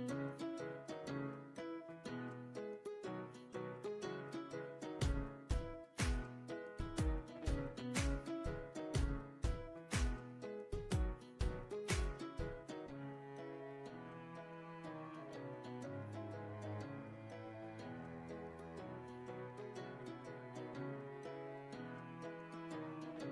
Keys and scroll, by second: 18.8 BackSpace.